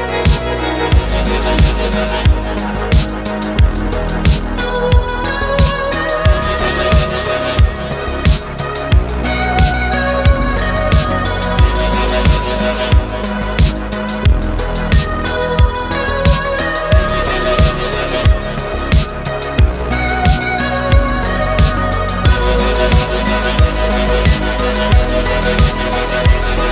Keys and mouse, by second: 0.4 click, 0.7-1.5 drag, 1.9 click, 2.8 click, 4.0 middle click, 5.1 click, 5.4 middle click, 5.8 e, 6.0 x, 6.8 y, 7.8 click, 8.3-10.3 drag, 10.4 middle click, 11.0 e, 11.1 y, 12.4 click, 12.6 e, 12.7 y, 13.7 click, 13.8 click, 14.3 e, 14.6 t, 15.0 y, 16.5 click, 16.7 middle click, 17.8 click, 18.7 e, 18.9 y, 19.7 click, 19.9 middle click, 20.8 click, 21.0 middle click, 21.4 e, 21.5 x, 22.3 click, 22.7 middle click, 23.2 click, 24.2 click, 25.0 click, 26.0 e, 26.2 x.